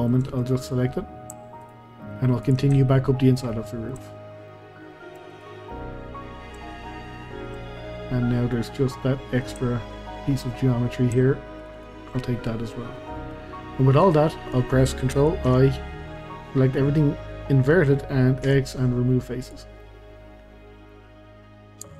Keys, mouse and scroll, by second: 1.6 shift+click, 2.4 shift+click, 2.7-5.3 shift+middle drag, 5.3 shift+click, 5.7 middle click, 6.3-6.6 scroll down 2, 6.6 shift+middle click, 7.2-7.6 scroll up 2, 7.6-10.0 shift+middle drag, 10.0-10.6 scroll up 2, 10.6-11.6 scroll down 2, 11.6 shift+click, 11.7 shift+click, 12.2-13.5 middle drag, 13.5 scroll down 2, 13.7-15.5 middle drag, 15.5 ctrl+i, 17.0-17.6 scroll up 2, 17.6 middle click, 18.4 x, 19.8-21.9 middle drag, 21.9 Tab.